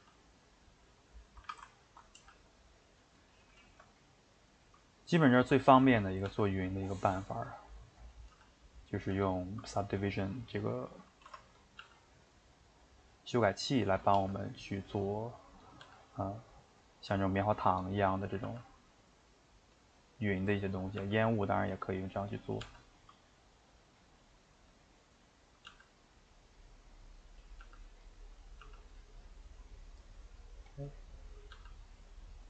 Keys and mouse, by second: 0.0 g, 1.3 a, 1.4 a, 1.8 ctrl+right click, 2.2 g, 3.4-4.8 shift+middle drag, 4.8 click, 5.0 middle click, 5.7 shift+click, 5.8 middle click, 6.3 g, 7.3 shift+middle click, 8.1 click, 8.3 g, 8.8 click, 9.0 g, 9.8-11.3 middle drag, 11.3 Tab, 11.5 click, 11.8 g, 13.5 middle click, 14.0 click, 14.2 g, 15.6 click, 15.8 g, 17.0 middle click, 17.8 click, 17.9 middle click, 18.4 g, 19.9-21.0 middle drag, 21.0 g, 21.8 middle click, 22.3 click, 22.6 g, 24.9 middle click, 25.7 g, 26.5 middle click, 27.4 click, 27.6 g, 28.4 click, 28.6 g, 29.1-30.7 middle drag, 30.7 click, 30.8 middle click, 31.5 g.